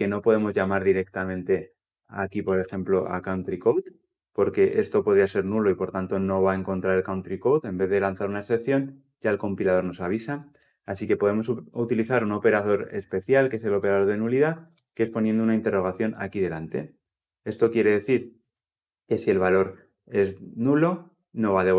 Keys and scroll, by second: 3.1 Return.